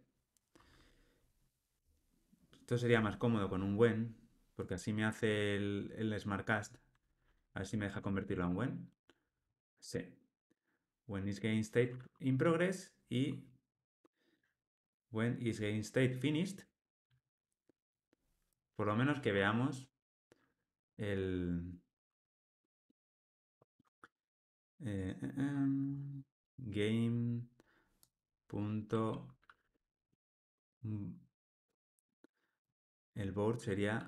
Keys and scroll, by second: 8.1 alt+Return, 16.6 Tab, 19.2 alt+Return, 31.8 Escape.